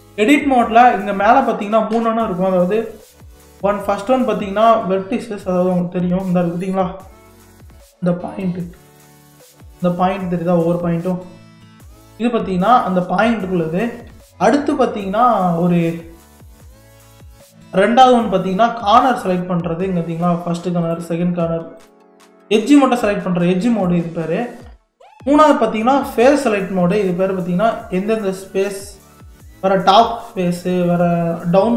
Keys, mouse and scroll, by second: 3.5 1, 5.1 middle click, 6.0 scroll up 1, 6.5-7.0 scroll down 5, 7.4-9.6 shift+middle drag, 9.6 click, 10.7 click, 11.7 KP_3, 12.3-12.6 scroll down 6, 12.8 shift+middle click, 13.4-13.9 scroll up 11, 14.3-16.3 shift+middle drag, 16.3 click, 18.9-20.2 middle drag, 20.2 click, 20.9 click, 21.8 click, 23.0 click, 23.8 click, 25.1 click, 26.9 click, 27.7-29.1 middle drag, 29.1 click, 30.0 click, 30.8 click.